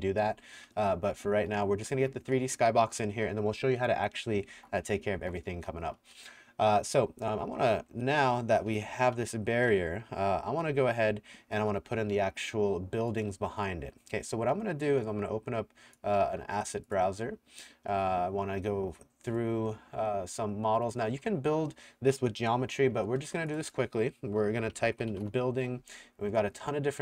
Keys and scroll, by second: 0.6-1.9 typing, 4.3-6.5 typing, 7.6-12.1 typing, 24.4-25.6 typing.